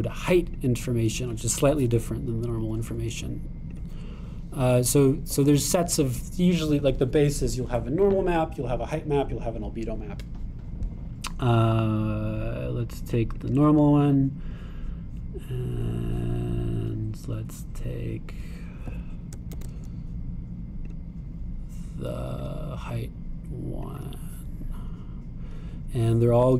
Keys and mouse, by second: 1.5 click, 4.7-14.5 drag, 20.3-22.0 shift+drag, 20.5 shift+d, 23.4 click.